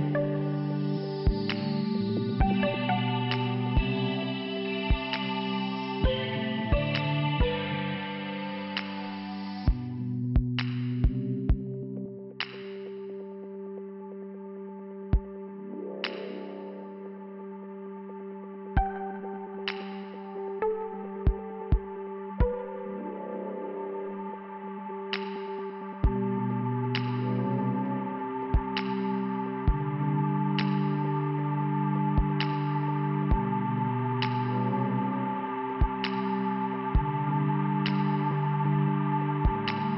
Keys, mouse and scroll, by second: 2.3 click, 3.4 click, 4.1 click, 6.6 click, 8.3 click, 11.1 click, 11.8 click, 13.4 click, 13.5 click, 14.4 click, 17.0 click, 18.8 click, 23.8 click, 24.8 click, 26.2 click, 26.3 click, 27.1 click, 29.0 click, 30.6 scroll up 2, 31.0 click, 32.0 click, 33.6 click, 33.7 click, 34.5 click, 36.3 middle click, 37.1 click, 38.0 click.